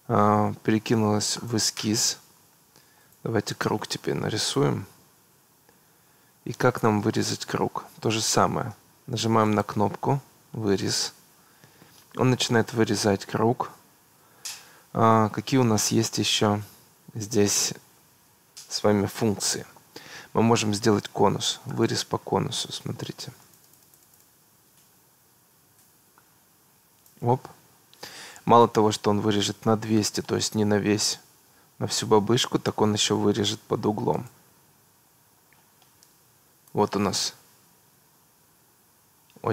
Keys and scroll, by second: 5.1 Escape.